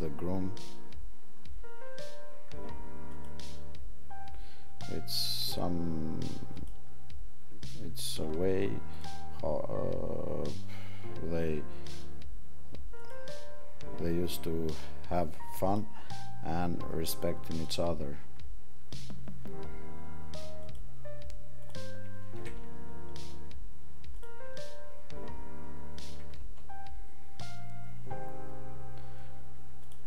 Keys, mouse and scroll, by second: 29.8 click.